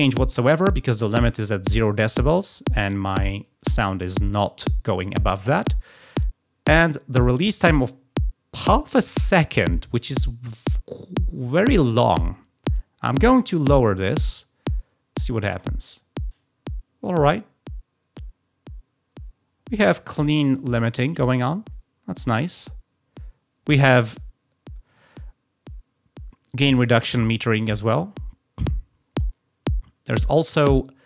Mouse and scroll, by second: 13.3-19.8 drag, 27.6-29.2 drag.